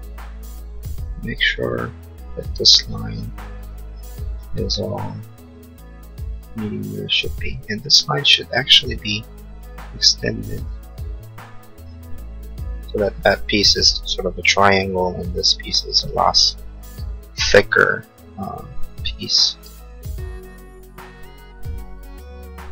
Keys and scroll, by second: 3.6 Escape, 10.5 e, 19.3 l.